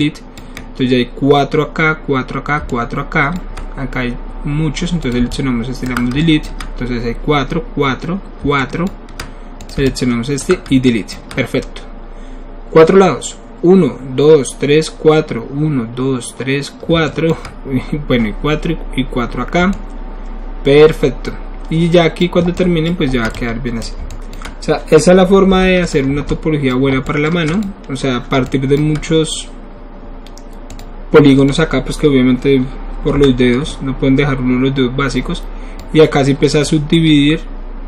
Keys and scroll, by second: 25.5 3, 26.1 alt+3.